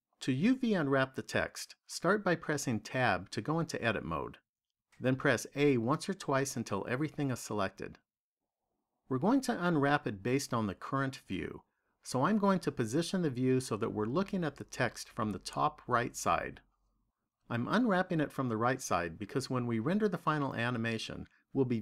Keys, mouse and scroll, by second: 2.4 Tab, 5.4 a, 13.0 middle click.